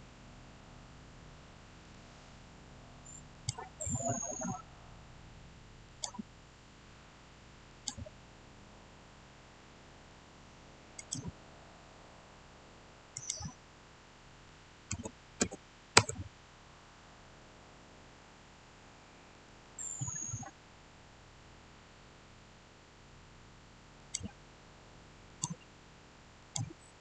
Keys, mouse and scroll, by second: 0.0 shift+scroll down 1, 3.2 click, 5.7 click, 5.8 click, 9.5-10.9 middle drag, 10.9 click, 11.4 scroll up 1, 13.0 click, 14.9-15.3 typing, 15.8 Return, 19.2 Return, 23.9 click.